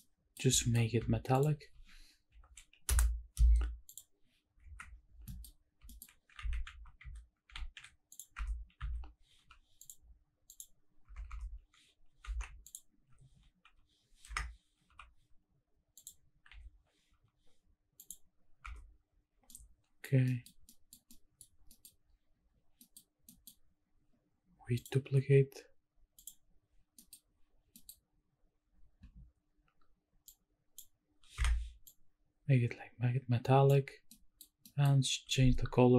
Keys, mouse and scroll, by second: 0.0-0.3 middle drag, 0.5 shift+middle click, 1.3 shift+click, 2.3 ctrl+l, 3.9 click, 4.6 KP_Decimal, 5.3 shift+middle drag, 5.5-6.3 scroll up 4, 5.8 shift+middle drag, 6.5 shift+`, 8.4 Tab, 8.8 a, 9.3 u, 11.0 Tab, 11.3 Tab, 12.2 2, 12.6 alt+click, 13.6 u, 16.5 u, 16.5 a, 17.1 u, 18.6 Tab, 19.5-20.0 middle drag, 20.1 scroll down 1, 20.3 middle drag, 20.5 scroll up 1, 20.7 middle drag, 21.0-21.4 middle drag, 21.5 scroll up 1, 21.6 scroll down 1, 21.7 middle drag, 22.8 middle click, 23.3 middle click, 24.8 click, 26.1 click, 27.0 middle click, 27.2-28.4 scroll up 2, 28.4-30.6 scroll up 1, 30.6 click, 30.6 middle click, 30.6 scroll up 1, 31.8-33.8 drag, 34.1 middle click, 34.6 middle click, 35.6-35.9 scroll up 1.